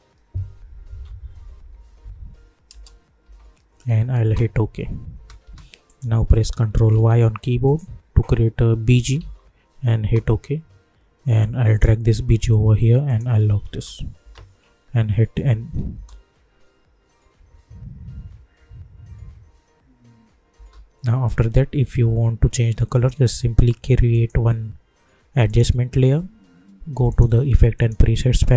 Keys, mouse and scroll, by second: 1.0 typing, 3.2 Left, 3.3 n, 4.2 Return, 5.1 space, 5.8 click, 6.9 ctrl+y, 8.7-9.6 typing, 9.9 Return, 11.4-13.0 drag, 13.7 space, 15.4 n, 15.9 space, 20.5 space, 22.9 right click, 24.1 click.